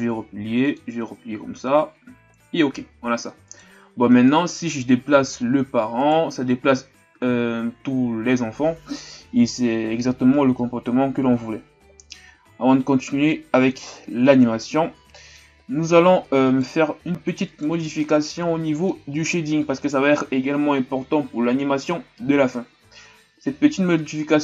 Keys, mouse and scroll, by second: 0.6 click, 3.4 right click, 3.8-4.2 scroll down 2, 4.2-5.1 middle drag, 5.1 g, 12.9-14.2 drag, 14.2-14.6 scroll down 2, 14.6-15.8 middle drag, 15.8-16.5 scroll up 4, 16.5 right click, 17.5 right click, 18.0-24.4 middle drag.